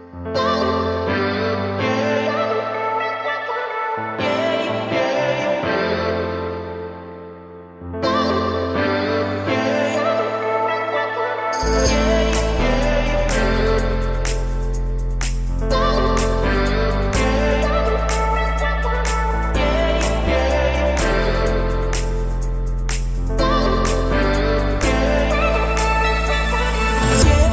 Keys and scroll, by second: 1.4 Escape, 3.0 1, 3.3 Return, 11.5 Escape, 14.5 1, 15.9 1, 16.4 Return.